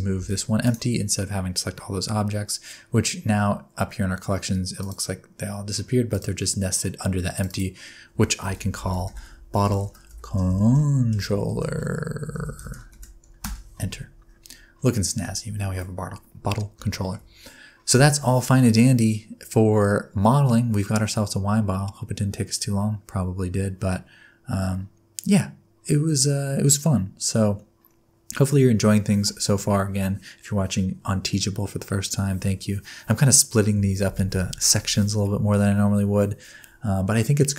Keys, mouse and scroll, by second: 0.1 g, 4.8 click, 6.1 click, 7.3 click, 7.5 click, 8.9 t, 10.4 BackSpace, 10.5 BackSpace, 12.6 l, 16.9 shift+middle click.